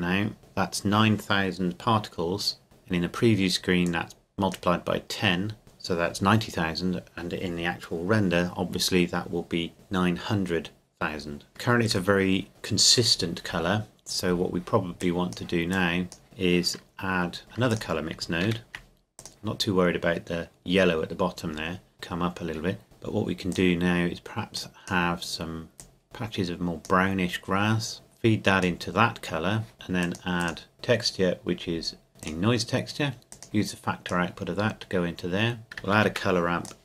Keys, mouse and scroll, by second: 0.4 shift+click, 2.6-3.8 scroll down 2, 3.8 click, 12.2-13.6 shift+middle drag, 13.9-15.0 scroll down 2, 15.0-18.2 drag, 18.4 shift+d, 19.2-21.4 drag, 21.9 click, 22.8 shift+middle click, 23.5-30.7 drag, 35.8 click, 35.9 shift+d, 36.6-36.8 drag.